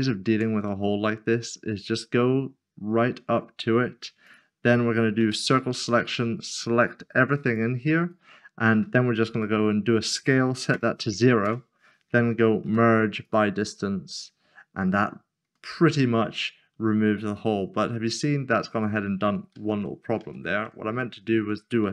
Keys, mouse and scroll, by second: 0.3 Tab, 0.9 middle click, 4.2 click, 6.1-7.4 scroll down 1, 7.4-8.0 scroll down 1, 8.0 right click, 9.9-10.7 typing, 11.4 Return, 13.2 click, 14.2 middle click, 15.1 scroll down 1, 15.7 middle click, 19.5 ctrl+z, 20.7 ctrl+middle click.